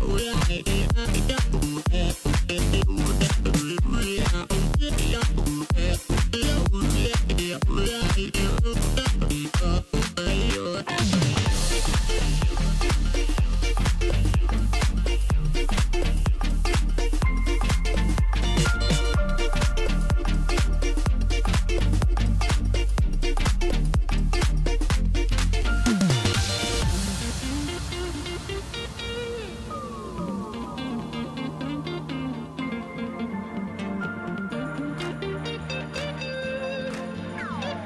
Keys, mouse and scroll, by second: 0.3 x, 1.3-2.8 scroll down 10, 2.8-3.1 scroll down 1, 3.1 shift+b, 5.0 scroll down 1, 5.2 middle click, 6.0 scroll down 1, 6.2 middle click, 6.9-8.1 scroll up 1, 10.5 3, 11.3 click, 11.5 click, 15.9 click, 19.5 ctrl+r, 23.4 ctrl+r, 26.1 shift+click, 26.2 shift+click, 26.8 scroll down 2, 27.1 middle click, 28.0 scroll up 1, 29.1 shift+d, 32.1 KP_3, 32.9-33.5 scroll up 2, 33.6-34.2 scroll up 2, 34.2-34.8 scroll down 1, 34.8 g, 36.1 scroll down 4, 36.3 middle click, 37.1-37.5 scroll up 1.